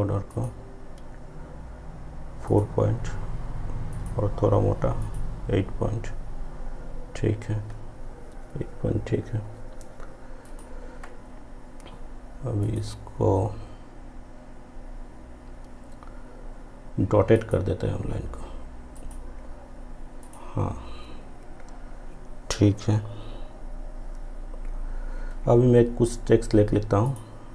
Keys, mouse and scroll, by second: 2.5 click, 10.5 click, 17.4 click, 17.5 click, 27.1 click.